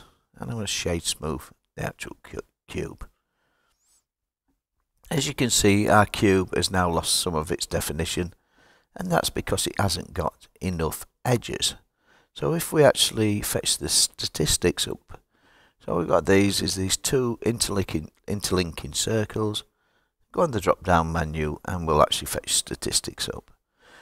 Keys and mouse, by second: 0.3 click, 0.7 right click, 14.4-18.4 drag, 19.9-22.0 drag, 23.6 click.